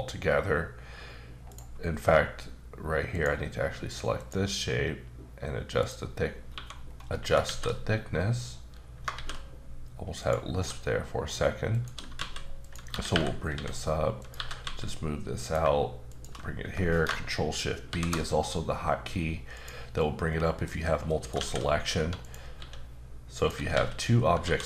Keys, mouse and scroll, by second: 1.5 right click, 3.1 click, 3.6 q, 4.2 click, 5.8 click, 6.3 scroll down 1, 6.5 1, 6.9 scroll down 1, 7.1 middle click, 7.4 shift+a, 9.1 shift+a, 10.2 click, 10.5 s, 11.7 click, 12.2-14.6 typing, 12.6 click, 14.2 click, 15.4 click, 16.1 shift+click, 17.9 ctrl+shift+b, 19.5 click, 20.0 middle click, 21.1 middle click, 21.3 shift+a, 22.2 click, 22.6-24.4 typing, 23.3 click.